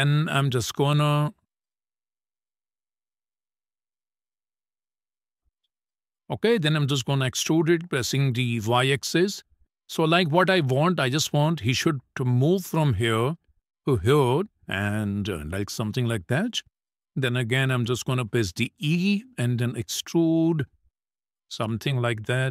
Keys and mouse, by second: 5.2 click, 7.2 e, 7.5 y, 13.8 shift+middle click, 15.1 click, 16.7 click, 17.9 e, 19.2 e, 21.2 middle click, 22.1 middle click.